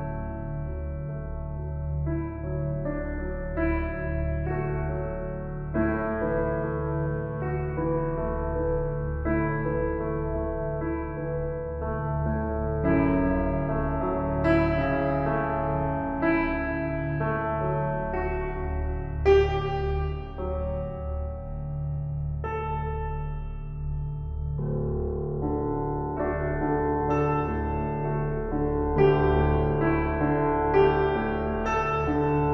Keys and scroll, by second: 4.5 ctrl+u, 31.4 ctrl+t.